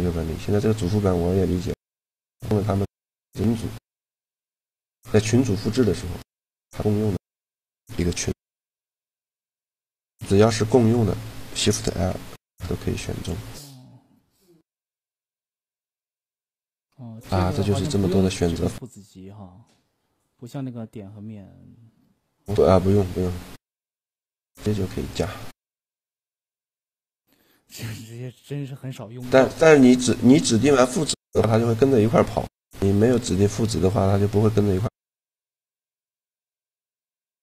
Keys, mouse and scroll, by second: 4.0-5.9 middle drag, 5.9-7.7 right drag, 7.9 shift+l, 9.8-10.9 middle drag, 10.9 a, 11.7 shift+l, 17.8-20.8 middle drag, 23.6-25.1 right drag, 24.2 g, 26.4-28.1 right drag, 26.6 g, 29.9-31.8 middle drag, 37.0 a.